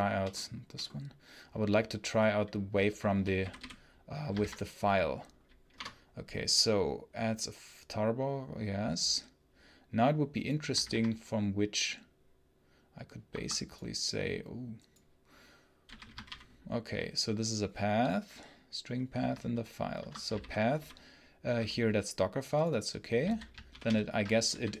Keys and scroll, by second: 2.8-3.7 typing, 4.3 ctrl+b, 5.6 Return, 10.7 ctrl+b, 13.1 Escape, 15.7 a, 16.2 ctrl+p, 19.8 Escape, 23.7 ctrl+super+l, 24.3-24.8 typing.